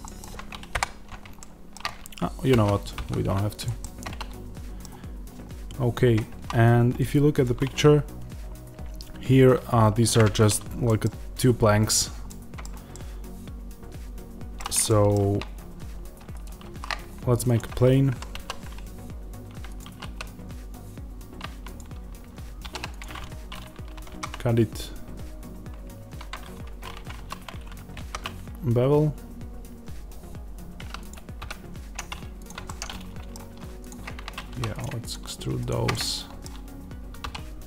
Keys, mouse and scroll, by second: 0.6 KP_7, 2.5 ctrl+z, 3.5 click, 3.7-7.3 middle drag, 5.8-7.3 scroll up 2, 10.1-16.2 middle drag, 10.1-10.8 scroll up 2, 16.2 shift+right click, 18.0 Tab, 18.2 s, 19.7 click, 19.7 s, 21.6 click, 23.2 Escape, 26.5 Escape, 27.0 2, 27.8 ctrl+b, 31.0 click, 32.3 x, 32.5-33.8 middle drag, 33.8 click, 34.4 3, 34.6-35.8 shift+drag, 35.8-37.6 middle drag, 37.1 e.